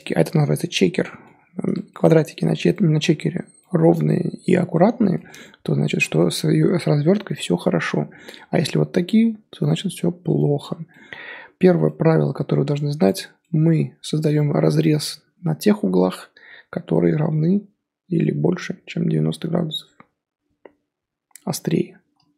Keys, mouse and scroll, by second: 7.8-8.3 scroll down 2, 8.3 middle drag, 8.6-9.3 scroll up 1, 9.3-9.9 scroll up 1, 9.9-10.6 middle drag, 10.6 scroll down 1, 10.9-13.1 middle drag, 13.1 click, 13.4-16.4 middle drag.